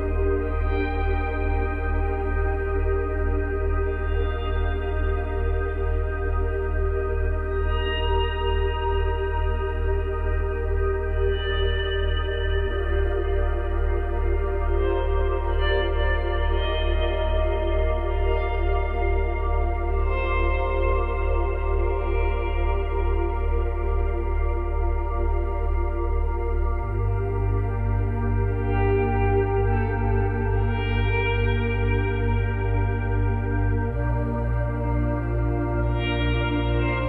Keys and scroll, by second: 5.5 space, 12.4 space, 14.2 space, 18.7 space.